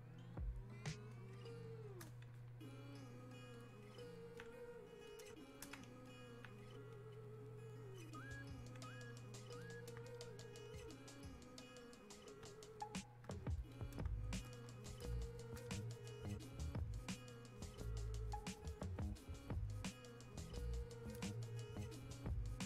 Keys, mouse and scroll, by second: 10.7-16.1 drag, 16.1-22.6 drag.